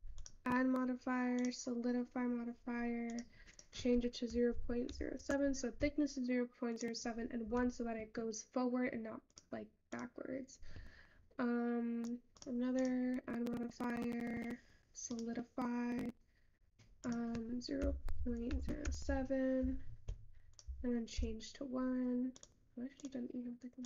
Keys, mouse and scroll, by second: 0.0 click, 0.8 click, 20.4 Tab, 22.2 click.